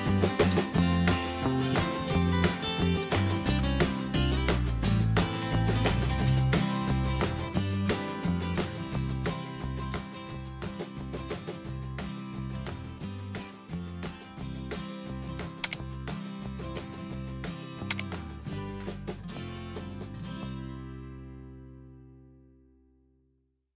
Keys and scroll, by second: 3.0 Down, 5.4 Tab.